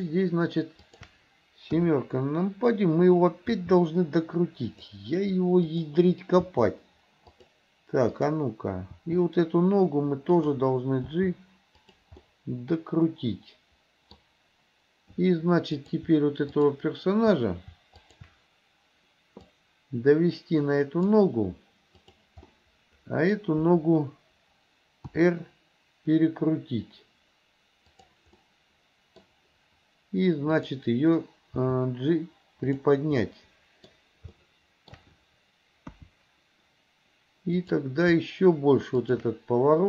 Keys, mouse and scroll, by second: 0.0 shift+click, 0.9 shift+click, 1.8 KP_7, 3.6 r, 5.7 click, 6.5 r, 8.2 click, 9.0 r, 11.2 g, 12.2-14.2 middle drag, 15.8 click, 16.5 shift+click, 18.0 shift+click, 19.5-21.2 drag, 22.1 click, 22.5 middle click, 25.2 r, 28.5 middle click, 30.6 click, 31.7 g, 33.2-33.9 middle drag, 34.4 middle click, 34.6 shift+middle click, 36.0 KP_1, 37.6 click, 39.1 shift+click.